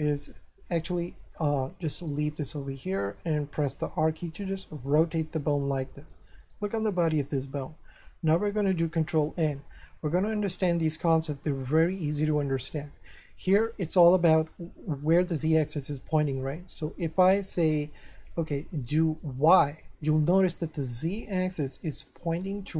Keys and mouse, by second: 2.0 right click, 2.3 middle click, 3.8 r, 4.8 click, 5.2 middle click, 6.4 right click, 7.1 shift+middle click, 9.0 ctrl+n, 19.2 click, 20.4 middle click, 21.5 shift+middle click.